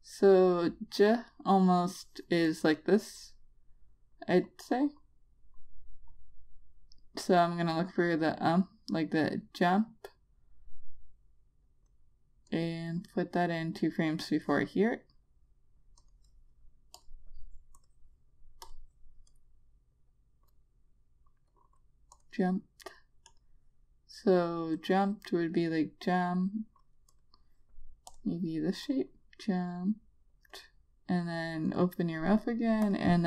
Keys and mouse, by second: 0.8 click, 17.5 click.